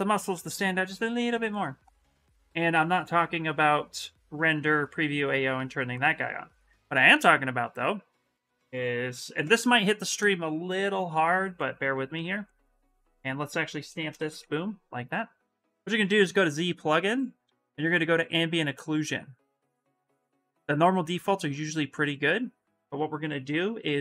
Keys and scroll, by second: 8.9 Return, 9.2 Return, 13.9 shift+s.